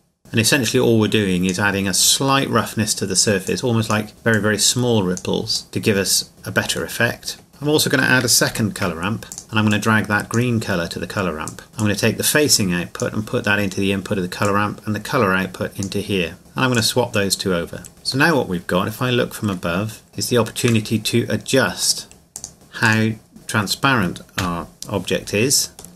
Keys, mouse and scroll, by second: 0.4 click, 3.8-4.1 drag, 7.0 middle click, 7.5-8.2 scroll down 2, 8.5 shift+d, 9.3-10.7 drag, 18.3 middle click, 19.5 middle click, 20.1 scroll down 2, 20.7 middle click, 21.8 click, 23.3 middle click, 24.4 KP_0, 25.8 click.